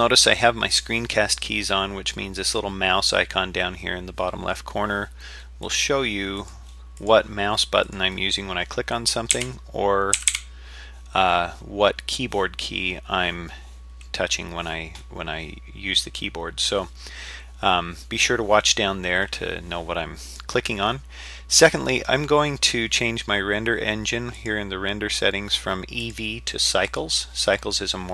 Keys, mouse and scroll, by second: 5.6 click, 6.4 click, 7.0 click, 7.8 click, 9.3 a, 10.2 a, 10.3 a, 24.4 click, 26.0-27.0 drag.